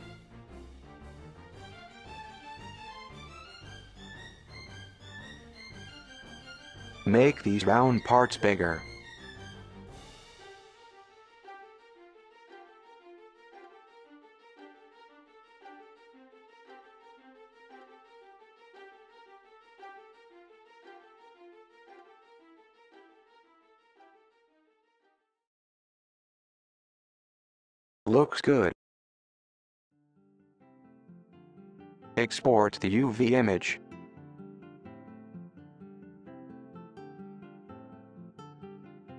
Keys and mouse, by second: 1.4 click, 1.7 g, 4.3 middle click, 4.7 a, 6.9 s, 9.1 middle click, 11.3 s, 13.4 super+z, 13.5 super+z, 13.8 super+z, 14.6 click, 15.0-15.5 drag, 15.5 s, 16.0 g, 16.7 s, 17.1 g, 18.7 s, 20.3 s, 22.4 g, 23.8 shift+middle click, 24.5 g, 32.9 click, 33.4 click, 33.8 a, 34.3-35.3 drag.